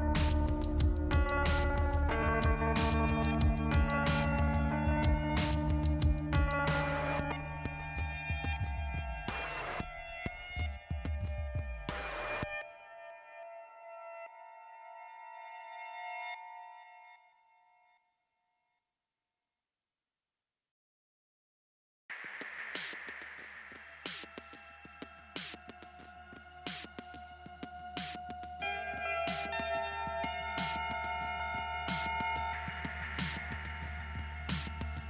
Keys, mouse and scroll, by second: 0.5 double click, 1.2 click, 2.3 click, 2.6 click, 4.3 click, 6.1 click, 9.2 click, 9.5 double click, 14.7 middle click, 20.6 click, 22.9 click, 23.2 click, 27.8 click, 29.9 scroll up 2, 31.5 scroll down 2, 33.1 scroll up 2, 34.8 click.